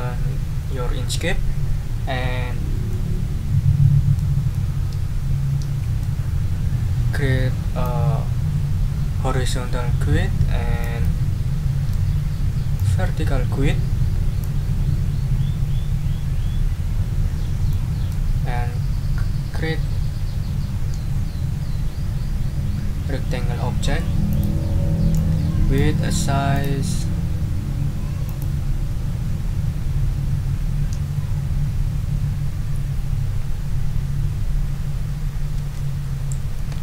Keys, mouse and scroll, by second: 2.9-4.3 middle drag, 4.5 click, 7.8-11.0 drag, 12.7-14.6 drag, 24.3 click, 25.1 click, 26.5 click, 28.2 click, 35.5 ctrl+a, 36.3-36.8 typing.